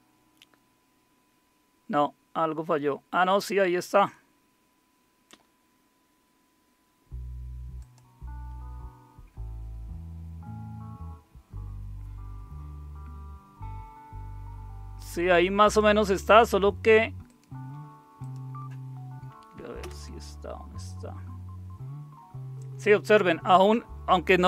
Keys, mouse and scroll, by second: 7.8 click, 15.6 click, 17.2 click, 18.2 click, 19.8 super+Return.